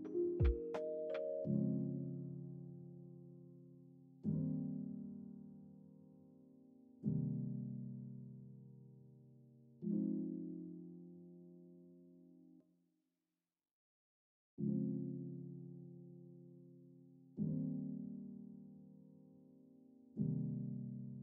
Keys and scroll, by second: 1.8 ctrl+s, 3.1 ctrl+s, 15.1 =.